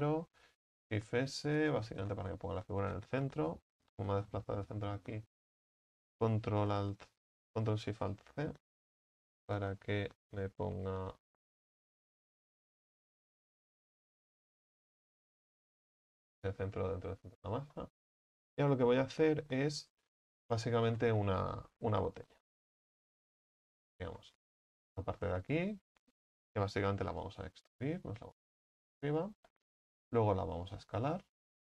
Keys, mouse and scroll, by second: 1.8 shift+s, 3.3 Tab, 13.0 ctrl+z, 15.6 ctrl+alt+shift+c, 16.4 Tab, 17.0-17.4 scroll up 4, 17.4 right click, 17.8-19.0 middle drag, 19.0 KP_1, 20.6 click, 21.0 shift+middle click, 21.5 a, 21.8 z, 22.4 a, 23.6 b, 24.2-25.6 shift+middle drag, 25.6-27.1 drag, 27.1 e, 27.7-29.5 drag, 29.5 shift+middle click, 30.2 s.